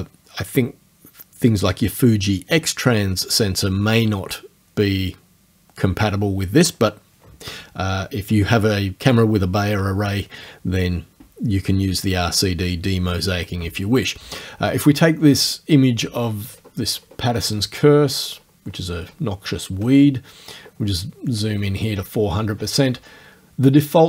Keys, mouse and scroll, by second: 16.4-17.5 ctrl+scroll up 2, 17.5-18.6 ctrl+scroll up 1, 18.6 ctrl+scroll down 2, 18.7-19.3 ctrl+scroll up 2, 19.3 ctrl+scroll down 2, 19.5-19.8 ctrl+scroll up 2, 20.3 ctrl+scroll down 2, 21.1 ctrl+scroll down 2.